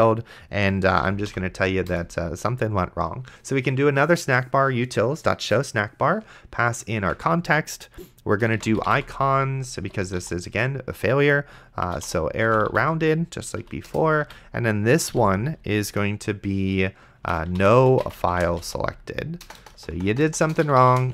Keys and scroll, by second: 0.7-1.8 typing, 1.9 Return, 7.3 Tab, 8.5-10.7 typing, 11.7-12.7 typing, 13.6 Down, 13.9 Return, 14.2 Tab, 15.1 ;, 17.5-21.1 typing.